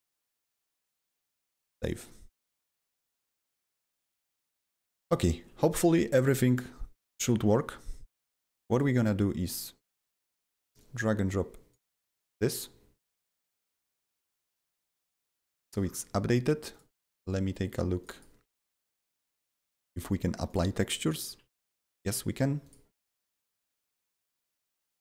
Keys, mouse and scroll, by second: 0.3 ctrl+v, 1.0 ctrl+s, 2.6 click, 3.4 click, 4.8 click, 5.1 click, 8.7 click, 10.7-15.6 drag, 15.7 scroll down 8, 15.7 double click, 16.7 click, 16.7 click, 18.0 click, 19.5 double click, 19.5 scroll down 1, 19.7 click, 20.4 click, 21.2 click, 21.4 a, 22.6 click, 22.9 click, 23.4 click, 23.5 d, 24.8 click.